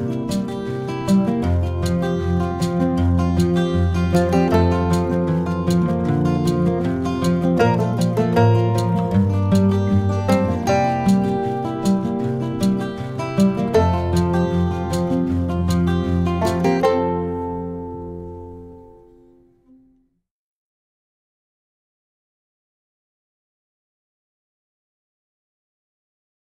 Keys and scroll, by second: 6.6 shift+super+[.